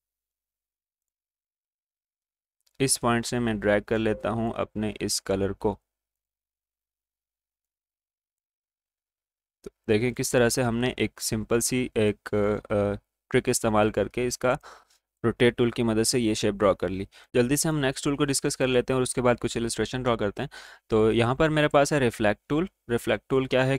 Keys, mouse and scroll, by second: 1.0 click, 2.0 g, 2.7-17.3 drag, 17.7 right click.